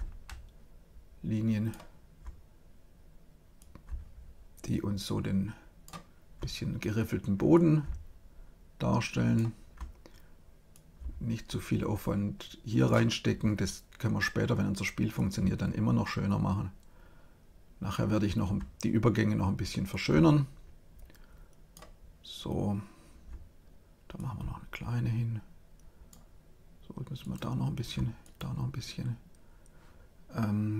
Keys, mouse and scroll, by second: 3.5-5.4 drag, 7.4-9.4 drag, 10.6-12.3 drag, 15.1-16.8 drag, 19.8-21.4 drag, 24.1-26.0 drag, 27.1-29.8 drag.